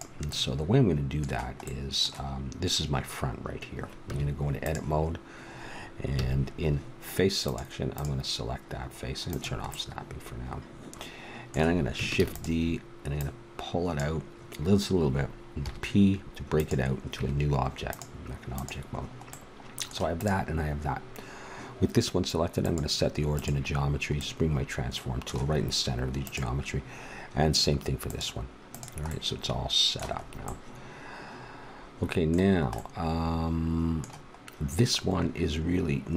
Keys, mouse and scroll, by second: 0.3-1.8 middle drag, 4.0 Tab, 6.1 a, 7.9-9.8 drag, 10.0-11.3 middle drag, 12.2 shift+d, 13.1-14.9 drag, 15.6 p, 17.2 Tab, 18.5 right click, 24.2 middle click, 28.0-29.7 drag.